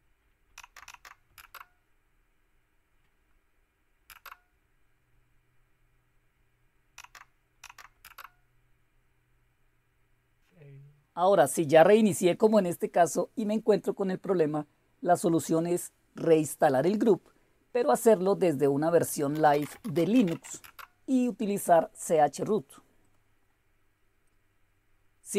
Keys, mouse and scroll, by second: 0.4 Down, 0.7 Down, 1.2 typing, 4.0 Return, 6.9 Down, 7.5 Down, 7.9 Return, 11.2-13.5 drag, 14.3-15.3 drag, 18.5 click, 19.0-21.7 typing, 23.0 click.